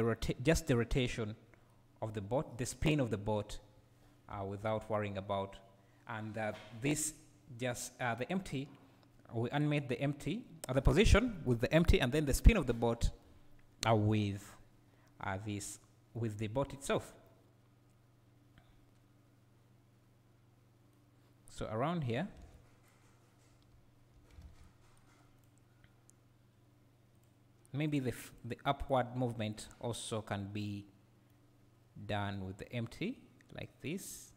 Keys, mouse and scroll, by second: 0.3 scroll up 2, 4.4 Escape, 17.3 right click, 19.0 right click, 21.4-22.4 right drag, 22.4 alt+a, 23.0-25.5 right drag, 23.0-23.8 scroll up 1, 23.8 `, 27.3 click, 30.1-32.2 right drag, 32.2-34.3 drag.